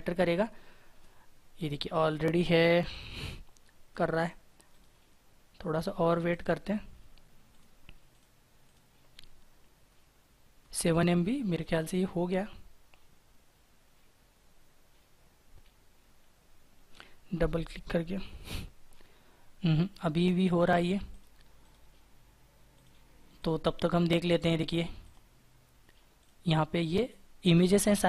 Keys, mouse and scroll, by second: 4.5 right click, 10.8 double click, 21.4 right click.